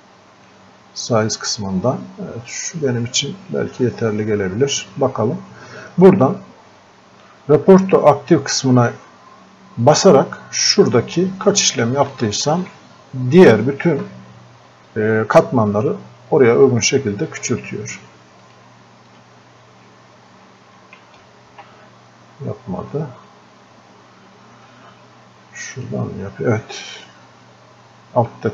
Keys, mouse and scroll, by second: 11.3-11.7 scroll up 1, 12.2-17.3 alt+drag, 20.6 ctrl+z, 25.8 click.